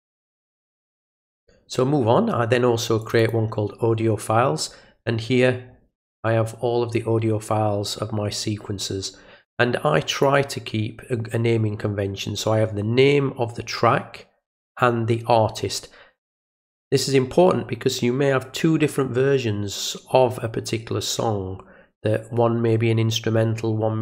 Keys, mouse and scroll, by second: 0.9 click, 3.0 click, 3.2 click, 5.7 middle click, 5.7 scroll down 1, 10.1 click.